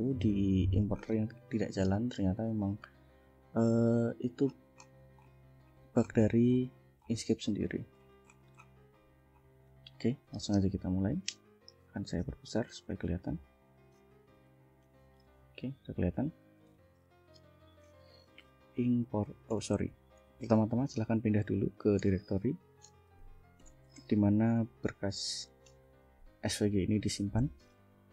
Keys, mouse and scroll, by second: 1.0 scroll up 2, 1.8-2.6 scroll down 4, 3.1 scroll down 2, 3.9 click, 4.5 scroll up 2, 5.2-5.6 scroll up 2, 6.1-7.3 scroll up 6, 8.0-8.9 scroll up 2, 9.0-9.6 scroll up 4, 10.2 click, 12.2 ctrl+=, 15.6 ctrl+-, 16.7 ctrl+l, 18.1-23.8 typing, 24.0 Tab, 25.7 Tab.